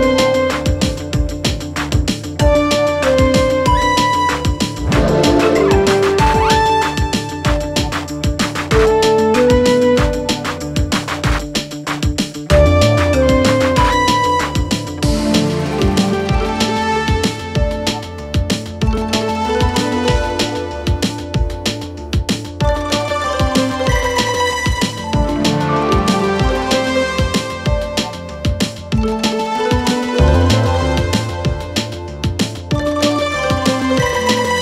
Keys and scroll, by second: 3.1 3, 3.4 Delete, 3.7 4, 12.5 3, 14.3 4, 16.1 3, 17.1 4, 17.9 ], 19.0 4, 19.7 3, 20.4 ctrl+d, 20.5 Escape, 21.5 4, 29.5 Delete.